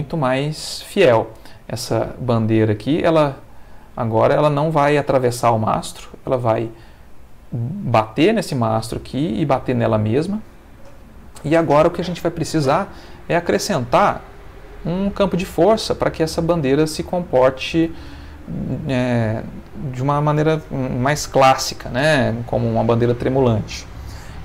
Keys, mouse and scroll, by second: 2.5 middle click, 3.2-4.5 middle drag, 5.2 middle click, 8.3-9.6 middle drag, 10.0 middle click, 10.8 middle click, 13.0 middle click, 14.8 click, 15.9 ctrl+middle click, 17.3 shift+middle click, 18.2 ctrl+shift+middle click, 21.6 Escape.